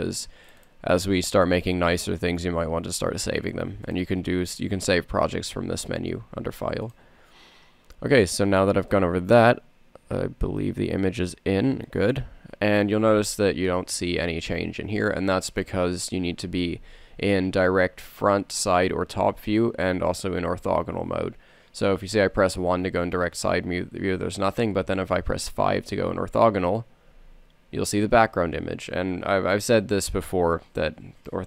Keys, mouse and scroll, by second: 2.9-6.3 drag, 7.9-12.8 drag, 12.8-13.8 middle drag, 21.8 KP_1, 26.5 KP_5, 28.8 middle click.